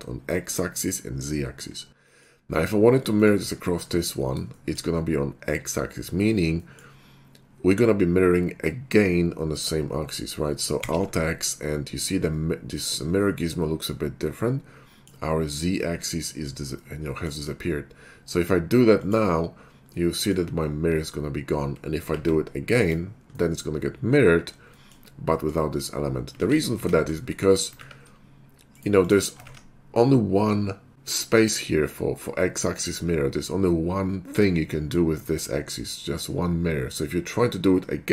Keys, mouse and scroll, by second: 2.1 middle click, 2.5 scroll up 1, 3.1 shift+click, 3.6 9, 4.5 shift+middle click, 6.6 shift+middle drag, 10.8 alt+x, 13.4-16.8 middle drag, 16.9 middle click, 17.4 middle click, 18.9 click, 19.9-20.3 scroll up 1, 22.3 alt+x, 22.8 click, 23.5 middle click, 24.7 shift+middle click, 26.4 ctrl+z, 26.8 ctrl+z, 28.7 right click, 29.0 click, 29.5 ctrl+`.